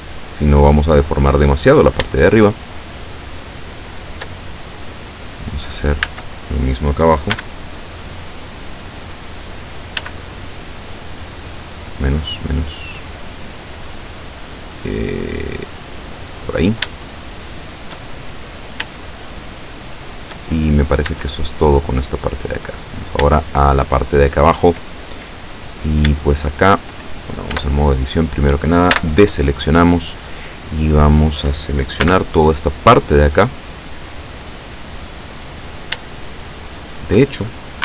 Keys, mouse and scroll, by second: 1.1 click, 2.3-4.4 shift+middle drag, 6.1 a, 7.4 b, 8.6 click, 10.1 s, 11.8 scroll up 1, 12.4 scroll up 1, 16.4 click, 17.1 shift+middle click, 17.2 shift+scroll up 2, 18.3-18.8 shift+scroll down 3, 19.0-20.6 shift+middle drag, 21.2 Tab, 22.6 right click, 23.5-25.0 shift+middle drag, 25.5-26.1 scroll up 1, 26.2 shift+middle click, 27.5 Tab, 28.9 a, 32.1 b, 32.5-35.9 drag, 36.1-37.3 shift+drag.